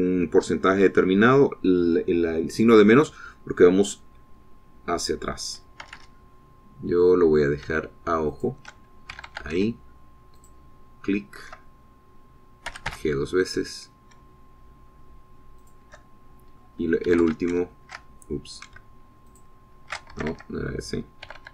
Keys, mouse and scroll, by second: 7.2 g, 9.8 shift+click, 10.5 shift+a, 11.0 alt+shift+a, 11.8 alt+shift+click, 14.1 g, 17.0 shift+click, 18.5 a, 18.7 q, 20.7 alt+shift+click.